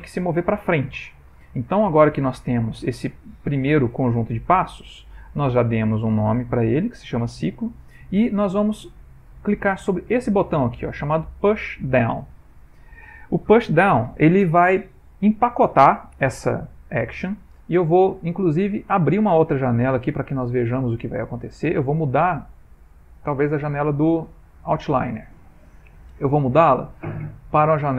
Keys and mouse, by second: 2.2 click, 18.8 click, 22.6 click.